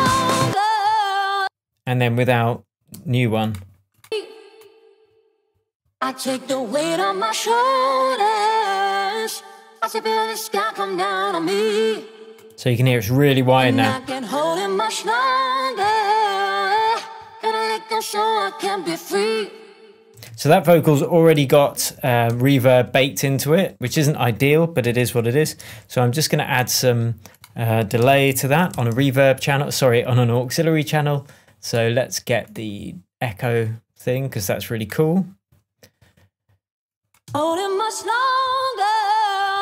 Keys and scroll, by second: 20.1 space, 22.2 shift+Tab, 26.5 alt+super+t, 28.0 alt+super+r, 28.3-29.2 typing, 37.2 space.